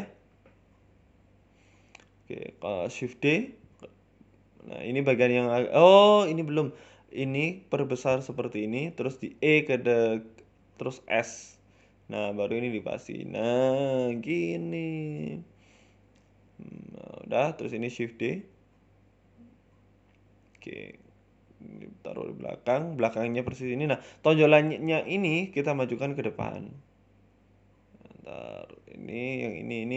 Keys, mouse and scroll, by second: 0.1 ctrl+z, 0.3 Tab, 1.0 a, 1.5 click, 1.9 shift+d, 3.9 middle click, 4.2 scroll up 2, 4.4 middle click, 4.6 scroll down 2, 4.9 middle click, 5.1 ctrl+z, 5.5 middle click, 5.8 scroll up 1, 6.0 middle click, 6.3 ctrl+r, 7.3 shift+middle click, 7.6 s, 9.1 e, 9.4 s, 10.3 KP_3, 11.0 s, 12.8 middle click, 14.7 Tab, 14.9 middle click, 15.5 Tab, 15.7 middle click, 16.3 KP_1, 16.5 Tab, 17.0 a, 17.2 shift+d, 20.2 middle click, 20.9 g, 22.1 KP_3, 22.8 g, 24.1 scroll up 2, 24.8 shift+middle click, 24.8-25.6 scroll up 3, 25.2 click, 27.4-27.9 scroll up 3, 27.7 middle click, 28.2 scroll down 2, 28.9 alt+shift+right click.